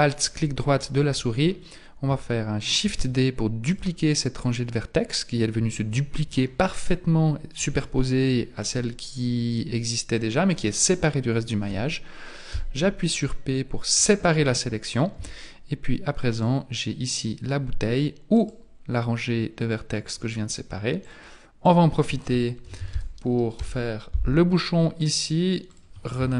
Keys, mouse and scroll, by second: 2.8 shift+d, 12.5 p, 15.2 Tab, 16.3 right click, 18.3 right click, 21.0 click, 21.8 click, 25.0 click, 25.7 click.